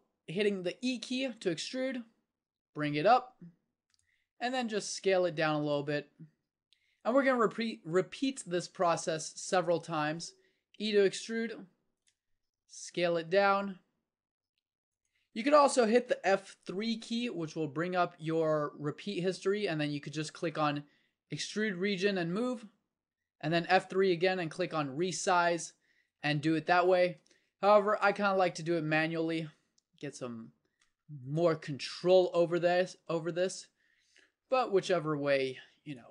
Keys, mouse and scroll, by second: 0.8 e, 4.5 s, 10.2 e, 12.4 s, 17.3 F3, 23.1 F3, 27.4 s, 29.8 e, 31.8 s, 34.8 e.